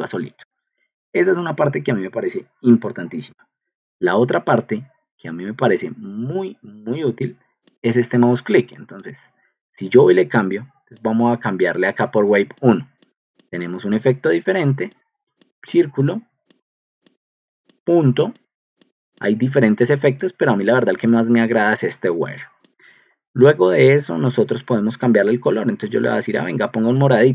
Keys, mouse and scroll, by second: 13.3 drag, 19.4 click, 22.2 click, 22.6 click, 26.4 click.